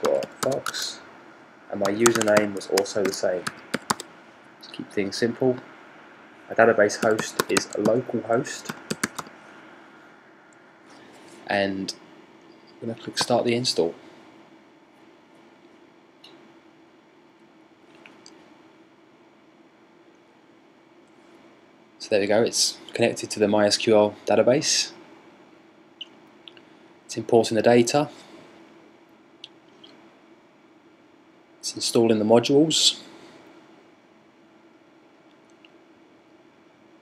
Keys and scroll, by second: 0.0-4.1 typing, 6.5-9.4 typing.